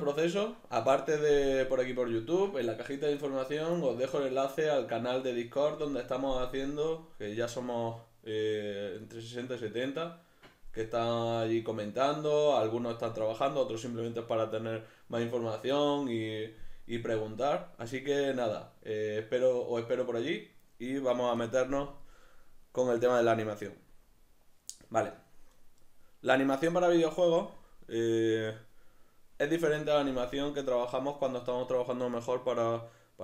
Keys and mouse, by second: 22.9 right click.